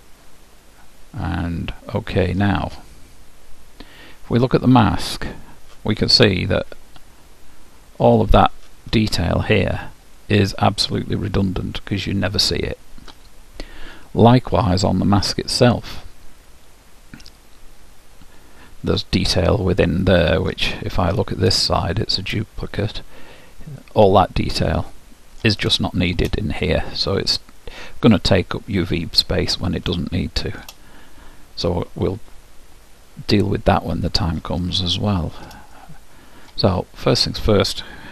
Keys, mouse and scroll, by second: 5.3-7.1 drag, 7.1-8.2 middle drag, 8.2-11.6 drag, 10.4-12.0 middle drag, 16.0-18.0 drag, 19.5-21.4 middle drag, 21.8-23.7 middle drag, 23.7-24.6 scroll up 1, 24.6 scroll down 1, 24.8-31.9 middle drag, 34.2-36.1 drag, 35.0-37.7 middle drag, 37.3-38.1 drag.